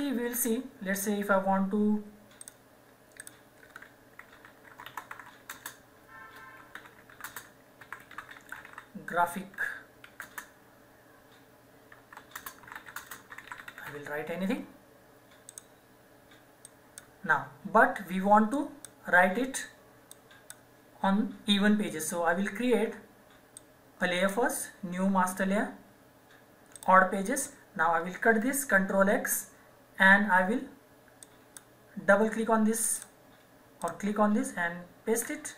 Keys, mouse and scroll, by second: 2.4 click, 4.6-10.2 typing, 11.7-14.3 typing, 15.4 click, 23.5 click, 26.7 click, 29.1 ctrl+x, 31.2 click, 35.1 ctrl+v.